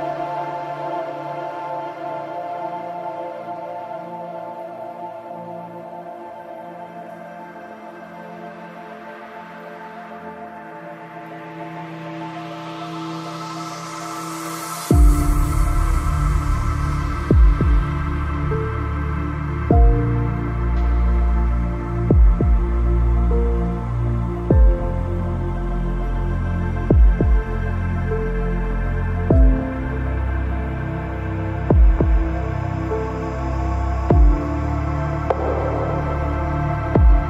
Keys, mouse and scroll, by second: 5.4-7.3 right drag, 6.3 i, 7.3 z, 7.5 middle click, 8.5-9.8 drag, 9.7 KP_Decimal, 9.9 KP_3, 10.9 ctrl+b, 12.9 Tab, 13.4 z, 14.7 Tab, 17.4 c, 17.9-18.9 middle drag, 21.9 right click, 22.2 c, 23.1 ctrl+r, 24.9 ctrl+r, 26.1 ctrl+Tab, 26.9-28.3 right drag, 26.9 c, 29.3-31.0 right drag, 29.8 i, 31.4 z, 31.7 middle click, 32.6-33.8 drag, 33.8 ctrl+b, 36.7 ctrl+s.